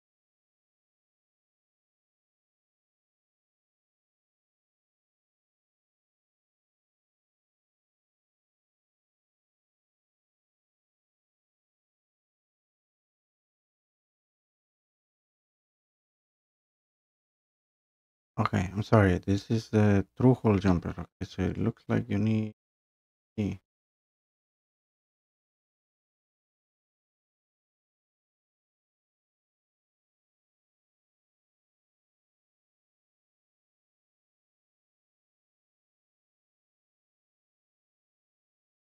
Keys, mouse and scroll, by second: 0.5 click, 0.6 click, 8.9 click, 9.1 click, 9.3 click, 9.9-10.2 scroll, 10.4 click, 11.3-15.3 typing, 11.5 click, 11.6-12.3 scroll, 11.8 click, 12.1 click, 12.4 click, 12.7 click, 12.8 click, 13.6 click, 13.7 scroll, 13.9 click, 14.5 click, 14.6 click, 15.2 click, 15.8 scroll down 1, 26.4 click, 27.1 click, 27.4 ctrl+c, 27.5 click, 27.7 ctrl+v, 27.8 click, 27.9 Escape, 28.0 click, 28.2 click, 28.3 click, 28.7-29.6 typing, 28.8 click, 29.4 click, 29.5 click, 29.7 click, 30.1 click, 30.6 click, 31.1 click, 31.2 click, 31.4 click, 33.9 click, 36.9 click, 37.1 click, 37.5 click.